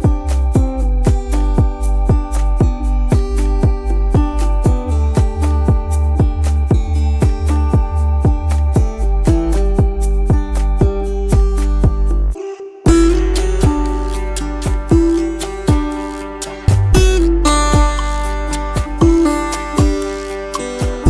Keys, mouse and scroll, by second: 3.3 alt+scroll down 1, 3.7 space, 4.3 t, 10.6 ctrl+x, 12.3 Delete, 17.1 t, 17.9 ctrl+a, 18.5 ctrl+v.